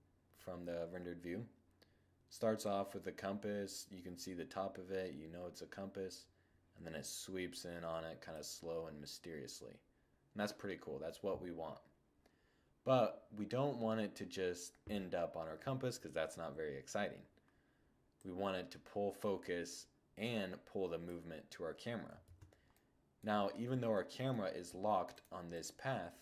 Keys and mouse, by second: 1.7-3.5 drag, 17.2-19.0 drag, 21.3 shift+z, 21.6 middle click, 21.7-23.0 middle drag, 24.2 click, 24.7-26.2 right drag.